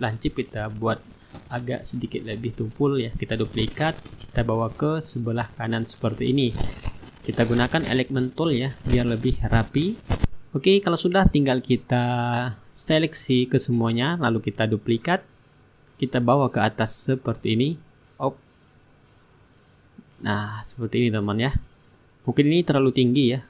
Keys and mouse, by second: 0.8 shift+right click, 3.3 ctrl+d, 4.6-6.7 drag, 7.4 click, 8.7-14.5 drag, 10.1 right click, 10.7-14.5 shift+right drag, 14.7 ctrl+g, 16.8 ctrl+d, 17.4-23.4 ctrl+drag.